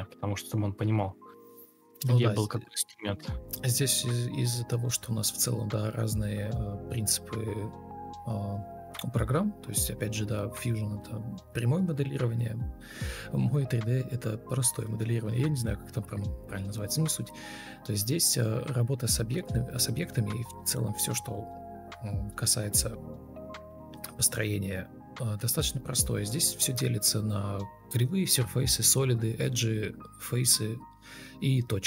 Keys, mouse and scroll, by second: 2.1 ctrl+space, 3.4 Escape, 3.5 ctrl+space, 5.7 Delete, 6.0 ctrl+space, 9.6 ctrl+space, 9.7 ctrl+e, 10.1 b, 11.1 ctrl+space, 11.6 alt+r, 15.0 ctrl+Up, 15.1 ctrl+Right, 15.4 ctrl+Page_Up, 15.5 ctrl+Page_Down, 15.9 ctrl+shift+Page_Up, 17.1 ctrl+Left, 17.2 ctrl+shift+Right, 18.1 Delete, 18.7 ctrl+z, 19.4 Delete, 19.8-22.6 typing, 23.4 Escape, 23.8 ctrl+space, 24.2 ctrl+m, 25.2 shift+r, 26.2 ctrl+space, 26.7 ctrl+shift+Left, 26.8 ctrl+shift+Right, 28.7 ctrl+u.